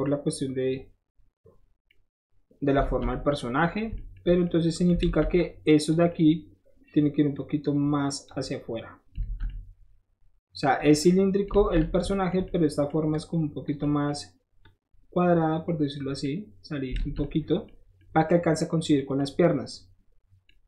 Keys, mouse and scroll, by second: 0.7-1.7 middle drag, 1.9 middle click, 3.0 alt+z, 5.0 alt+z, 5.4 click, 6.1 middle click, 7.4 click, 8.5 middle click, 9.3 alt+z, 10.6-13.1 middle drag, 11.5 alt+z, 13.1 click, 13.8 middle click, 14.6-15.9 drag, 15.9 middle click, 16.2 middle click, 17.0 alt+z, 17.2 middle click, 17.8 scroll up 1, 18.0 middle click, 18.9 middle click, 20.5 middle click.